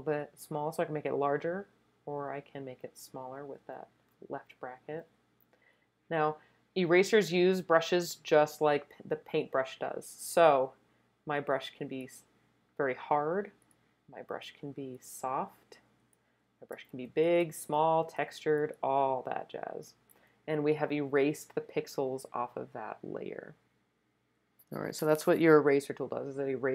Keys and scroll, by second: 2.4-3.2 typing, 5.0 [, 5.2 [, 16.7-17.4 typing.